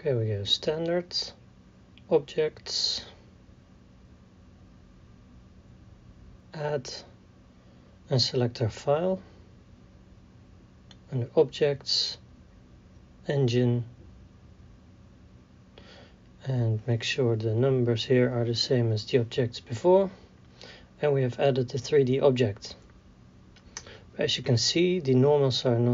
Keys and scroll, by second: 17.3 KP_1, 17.5 KP_8, 17.6 KP_0, 22.2 a, 24.0 w, 24.9 d.